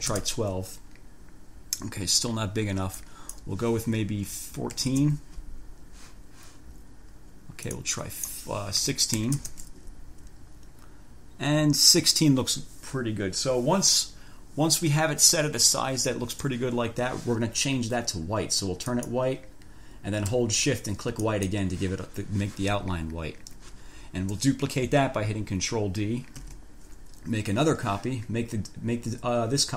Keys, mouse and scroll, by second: 0.0-0.7 typing, 3.2 click, 4.4 1, 5.0 4, 5.1 Return, 7.9-8.6 scroll up 2, 9.0 1, 9.4 6, 9.6 Return, 19.1 click, 21.4 shift+click, 26.6 ctrl+d.